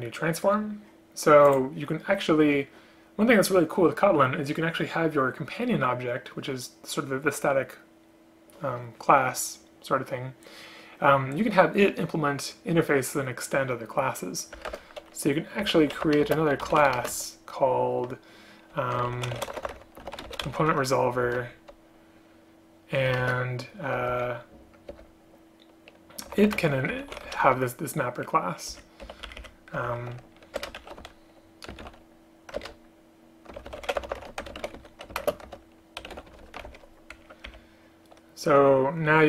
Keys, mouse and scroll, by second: 14.7 Return, 14.8 Return, 16.3 space, 17.1 space, 23.3 shift+space, 25.1 Return, 26.7 space, 28.8 Up, 29.1 End, 29.4 Left, 29.5 Left, 30.7 BackSpace, 32.7 ctrl+BackSpace, 35.3 shift+space.